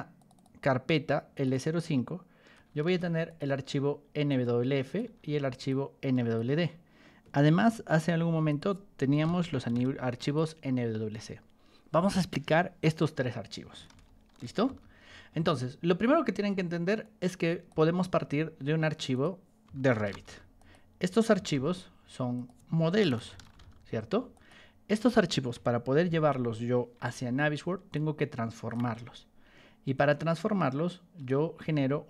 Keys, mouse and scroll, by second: 0.1 click, 0.3 click, 1.3 click, 1.4 click, 2.8 ctrl+1, 3.2 click, 4.2 ctrl+click, 5.6 ctrl+click, 7.6-10.1 typing, 8.4 click, 10.1 click, 13.1 Escape, 13.8 ctrl+2, 14.3 k, 14.6 y, 17.0 ctrl+click, 17.8 t, 18.5 scroll down 2, 19.1 click, 19.4-24.0 typing, 20.5 click, 22.3 click, 24.3 click, 26.0 r, 26.9 o, 27.9 ctrl+shift+click, 30.3 ctrl+click, 31.5 t.